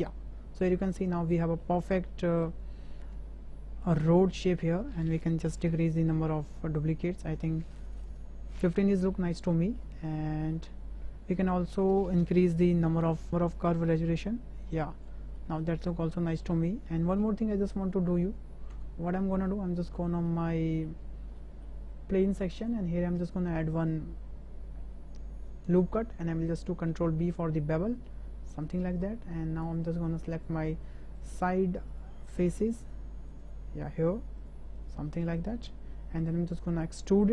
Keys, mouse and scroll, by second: 0.9-1.6 middle drag, 2.1 shift+middle drag, 2.5-3.8 middle drag, 3.8 scroll up 1, 4.3 shift+middle drag, 4.5 shift+scroll up 1, 5.6-7.4 drag, 8.0-8.7 middle drag, 9.2-9.8 middle drag, 11.3 click, 13.8-15.1 drag, 15.4 middle drag, 16.2 middle click, 16.6 middle click, 17.1 Tab, 18.0 Tab, 18.3 click, 18.7 Tab, 19.2 click, 20.1 shift+click, 20.5 click, 21.4 shift+click, 23.7 click, 26.6 ctrl+b, 30.3 click, 31.2 click, 31.5 shift+click, 31.9 shift+click, 32.8 shift+click, 33.4 shift+click, 34.4 shift+click, 35.1 shift+click, 35.4 shift+click, 35.7 middle click.